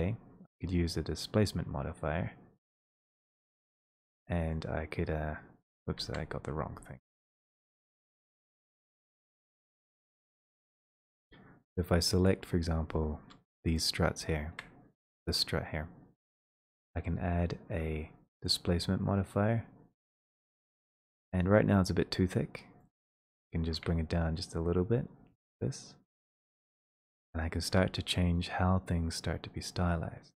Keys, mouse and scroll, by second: 3.0 click, 3.3 middle click, 3.4 middle click, 3.4 middle click, 5.8 click, 6.1 ctrl+z, 7.5-8.0 typing, 9.1 middle click, 9.1 f, 9.4 middle click, 9.4 middle click, 9.5 middle click, 10.5 click, 14.0 shift+click, 15.5 click, 18.7 click, 21.3 click, 21.3 click, 21.3-21.7 scroll down 4, 27.7 shift+click.